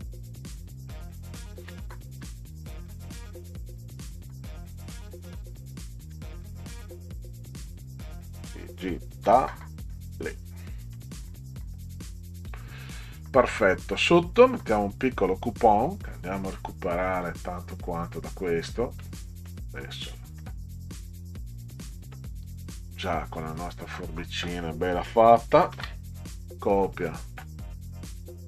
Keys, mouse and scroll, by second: 1.1 click, 2.3 f, 2.7 i, 3.3 g, 3.7 i, 6.0 a, 7.7 click, 9.3 t, 9.9 click, 10.7-11.7 typing, 12.6-14.0 scroll down 8, 16.1 Up, 16.5-17.5 scroll up 6, 17.9 click, 19.0 middle click, 20.1 middle click, 21.5-23.1 drag, 25.7 ctrl+c, 26.3 middle click, 26.9 middle click, 27.4 middle click, 28.2 click.